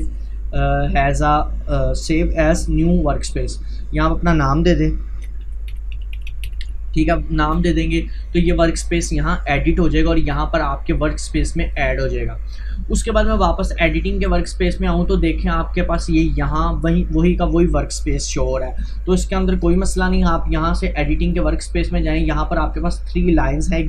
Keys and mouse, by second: 3.2 click, 5.2 shift+m, 5.5 u, 7.6 Return, 13.6 click, 15.9 typing, 21.2 click, 21.3 click, 23.6-23.8 typing.